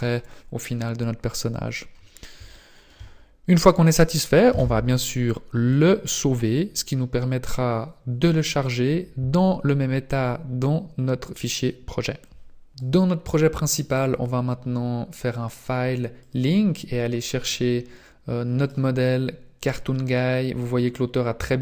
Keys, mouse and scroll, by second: 15.2 click.